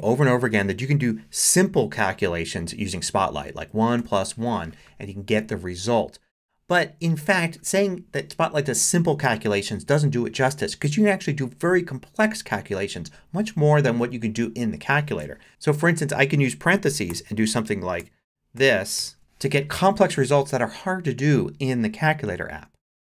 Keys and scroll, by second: 3.6 |, 4.0 shift+=, 5.2 |, 15.5 BackSpace, 17.1 shift+9, 18.6 shift+=, 19.0 shift+7.